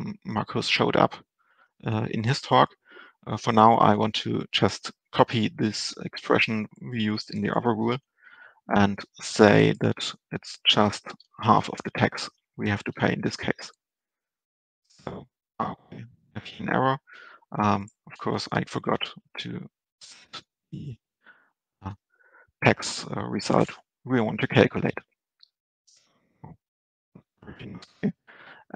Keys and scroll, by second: 5.5 ctrl+c, 8.0 ctrl+v, 12.6 Down, 13.2 Delete, 18.7 ctrl+space.